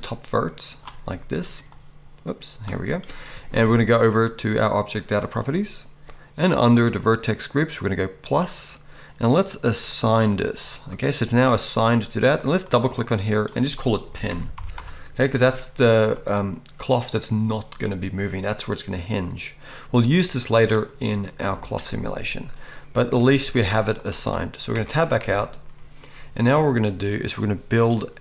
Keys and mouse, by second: 1.1-5.3 middle drag, 1.1 right click, 5.3-8.0 right drag, 8.0-13.1 middle drag, 13.1 right click, 13.3-16.6 middle drag, 25.2 Tab.